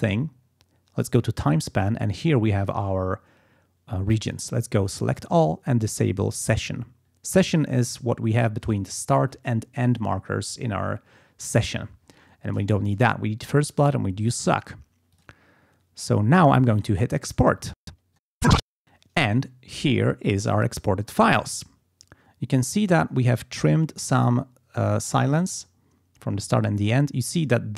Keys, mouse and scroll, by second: 1.1 click, 5.1 click, 6.3 click, 15.1 click, 18.0 click.